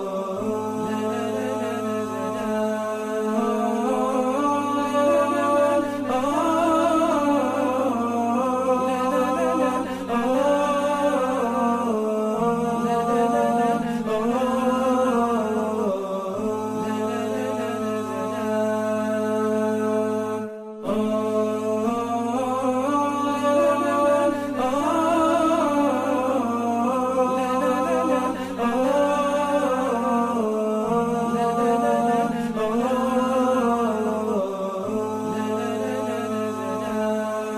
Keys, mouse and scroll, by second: 10.9 alt+scroll up 1, 11.5 alt+scroll down 1, 11.9 alt+scroll up 1, 14.7 alt+scroll up 1, 17.1 alt+scroll down 1, 18.4 alt+scroll up 1, 19.3 alt+scroll down 1, 20.6 alt+scroll up 1, 23.4 alt+scroll down 1, 25.8 alt+scroll up 1, 28.4-28.9 alt+scroll down 1, 29.4 alt+scroll up 1, 29.8 alt+scroll down 1, 30.1 alt+scroll up 1, 34.6-34.9 alt+scroll down 1, 35.1 alt+scroll up 1.